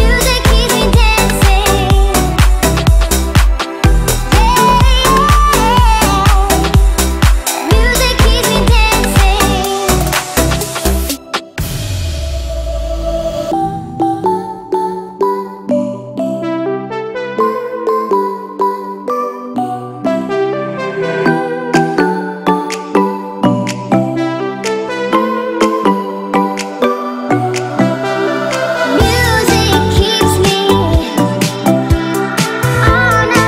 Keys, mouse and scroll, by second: 0.7 Right, 1.3-2.1 typing, 1.9 Return, 3.0 ctrl+z, 3.4 space, 3.9 click, 5.2 m, 5.7 ctrl+click, 6.8 Right, 7.0-8.9 typing, 9.8 click, 10.6 m, 11.0 ctrl+click, 11.0 ctrl+click, 12.1 Right, 12.3-13.7 typing, 16.1 space, 16.4-17.0 scroll down 1, 17.0 middle click, 17.4-18.3 scroll up 1, 18.3 click, 19.5 ctrl+c, 20.0 space, 20.3 scroll down 1, 20.4 click, 22.9 middle click, 23.8 m, 24.1 click, 25.4 Left, 26.7-27.9 typing, 27.6 Return, 28.3 middle click, 29.5 click, 29.9 scroll up 1, 30.9 f, 31.4 click, 32.4 3.